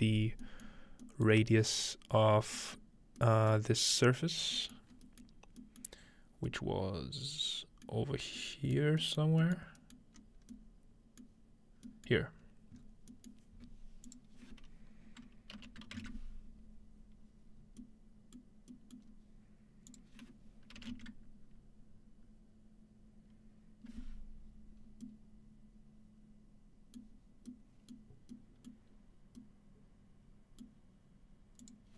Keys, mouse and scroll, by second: 0.4 middle click, 0.7 middle click, 1.3-2.6 middle drag, 1.4-3.2 scroll up 1, 3.6-6.5 middle drag, 4.4-4.9 scroll down 2, 4.9 scroll up 2, 6.2-7.9 scroll up 3, 7.5 middle click, 8.8 middle click, 9.2 middle click, 9.6 middle click, 9.6-11.9 scroll up 2, 10.0 middle click, 12.4-14.1 scroll up 3, 14.1 click, 14.1-15.6 scroll up 1, 17.6-19.1 scroll down 3, 18.5 middle click, 19.1 middle click, 19.1-21.2 scroll up 2, 19.9 click, 24.8-26.5 scroll down 2, 27.1 middle click, 28.9 middle click, 28.9-30.6 scroll up 2, 30.6-31.0 scroll up 1, 31.0 middle click, 31.6 click.